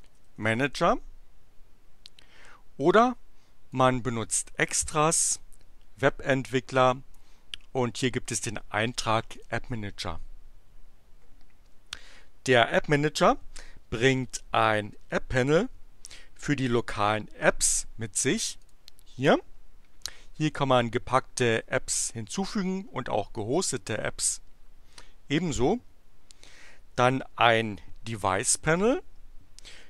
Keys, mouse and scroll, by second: 0.0-0.2 typing, 0.3 Return, 3.6 click, 9.3 click, 18.5 click, 28.6 click.